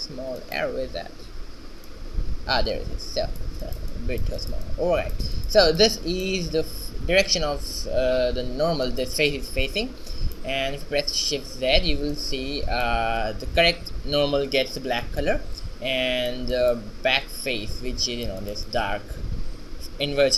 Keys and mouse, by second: 2.0-3.8 drag, 3.8 middle click, 11.0 Tab, 11.9 shift+z, 15.0-17.2 middle drag, 17.2 shift+z, 18.1-19.4 middle drag, 19.6-20.3 middle drag.